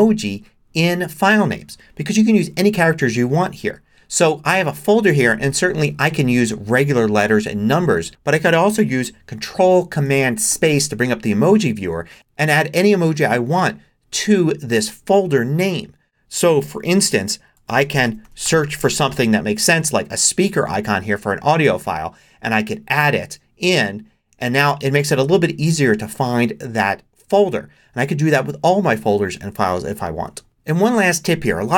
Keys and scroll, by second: 2.2 Return, 10.5 ctrl+super+space, 17.3-19.0 typing.